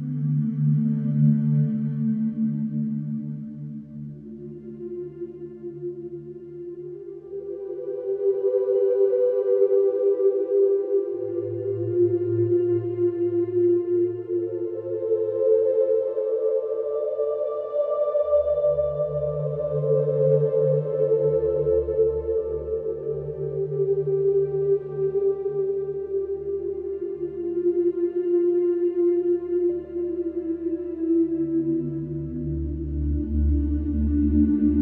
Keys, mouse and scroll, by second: 3.1 F3, 3.9 click, 5.1 click, 9.9 click, 11.2 click, 16.0 click, 18.5 click, 20.5 click, 21.7 click, 22.8 1, 24.2 click, 24.9 middle click, 26.1 click, 28.6 click, 31.1 click, 34.1 click.